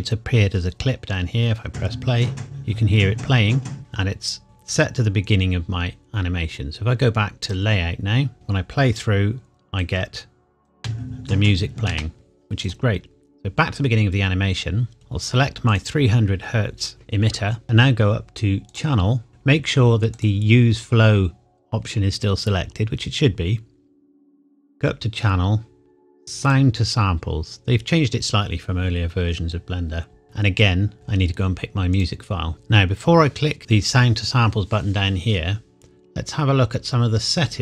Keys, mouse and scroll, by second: 1.6 space, 3.7 space, 3.8 click, 7.4 click, 8.3 space, 9.7 click, 9.9 click, 10.7 space, 12.6 click, 15.7 click, 18.7 click, 20.2 click, 24.5 click, 31.9 click.